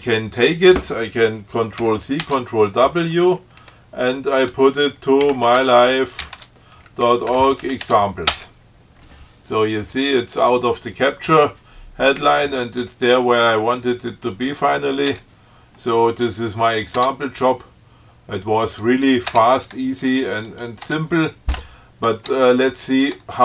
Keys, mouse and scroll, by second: 2.0 ctrl+c, 2.5 ctrl+w, 5.2-6.1 typing, 6.6 Tab, 7.6 shift+e, 7.9 shift+x, 8.1 shift+Tab, 8.5 shift+Return, 14.6 click, 15.4 Return, 17.0 click, 17.2 Tab, 18.9 click, 19.5 Return, 20.7 click, 21.1 Tab, 22.5 Tab.